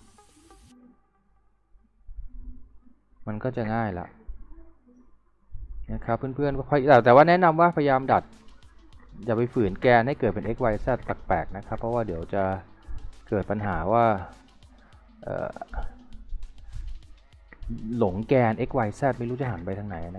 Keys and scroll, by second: 0.6 w.